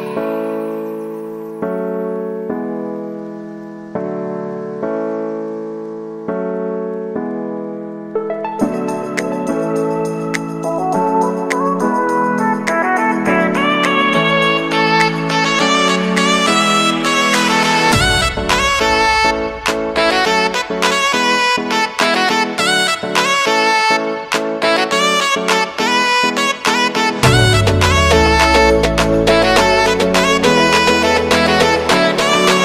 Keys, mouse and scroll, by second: 1.7 ctrl+a, 2.0-3.4 typing, 4.6 click, 7.5 click, 8.4 Return, 9.8 click, 10.3 space, 12.6 click, 14.6 Return, 15.1 space, 16.8-17.1 typing, 17.8-23.8 drag, 23.8 space, 26.0 u, 27.2 click, 29.2 alt+click, 30.1 space, 32.3 typing.